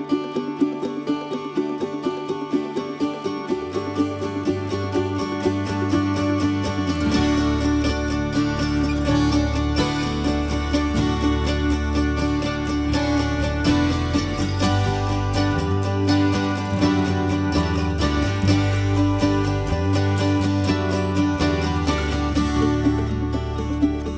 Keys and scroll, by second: 19.6 4, 19.8 Return, 21.9 Escape.